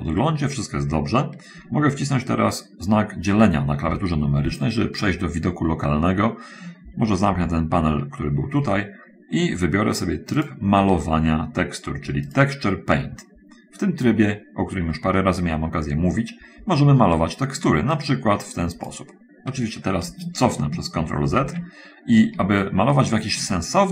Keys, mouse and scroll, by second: 0.0 scroll up 1, 4.2 /, 7.6 n, 10.8 click, 12.4 click, 15.4-18.1 middle drag, 18.4-19.4 drag, 21.4 ctrl+z, 23.0 shift+click.